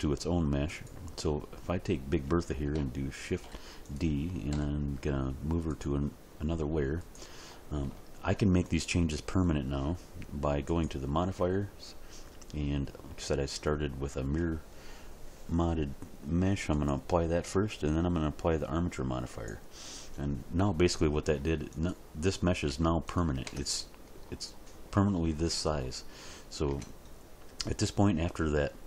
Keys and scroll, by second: 3.3 shift+d, 4.5 m, 22.7 g, 23.4 Tab, 26.7 Tab.